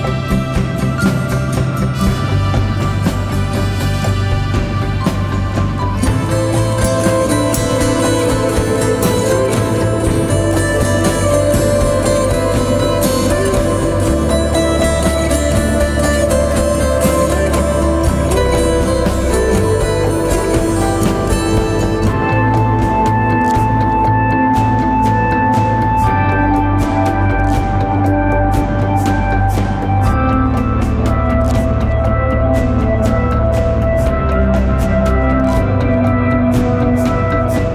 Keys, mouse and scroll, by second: 2.5 double click, 10.5 double click, 19.8 double click, 25.3 double click, 27.1 click, 27.5 ctrl+click, 36.3 alt+click.